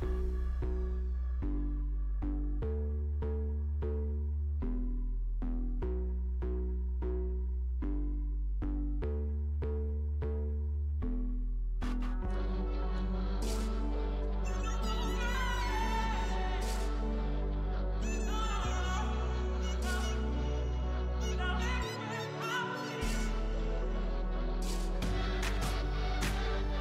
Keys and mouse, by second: 2.4-4.5 drag, 5.3-7.1 drag, 7.1 right click, 8.1-9.6 middle drag, 9.6-11.7 right drag, 11.7 KP_1, 12.4 z, 13.6 z, 16.8 Tab, 17.4 z, 18.0 z, 21.7 ctrl+j, 22.9 Tab, 23.4 a, 24.7 l, 25.0 click, 25.0 p, 25.8 Tab.